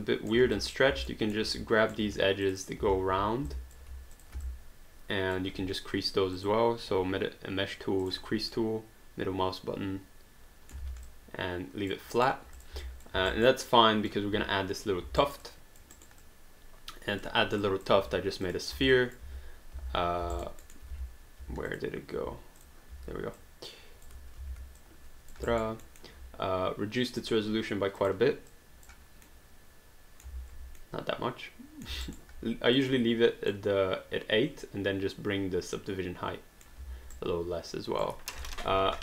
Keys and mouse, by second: 0.6 click, 1.1 alt+middle click, 1.5 right click, 2.0 q, 2.4 click, 3.5 alt+click, 4.2 shift+click, 4.4 alt+click, 6.4 click, 8.0 click, 8.5 middle click, 11.1 alt+d, 11.1 alt+click, 12.2 alt+right click, 12.6 click, 12.8 alt+click, 13.2 alt+d, 13.3 alt+right click, 13.7 alt+click, 15.2 alt+right click, 15.4 alt+click, 16.0 alt+right click, 16.2 alt+click, 17.6 alt+click, 18.5 click, 19.0 alt+click, 19.3 w, 20.4 alt+right click, 20.6 alt+middle click, 20.9 w, 21.7 alt+click, 22.6 click, 22.9 w, 23.3 click, 24.8 click, 25.5 alt+right click, 25.9 alt+middle click, 27.1 click, 29.3 middle click, 30.8 middle click, 32.1 alt+right click, 32.8 click, 33.5 middle click, 37.1 right click, 38.4 click.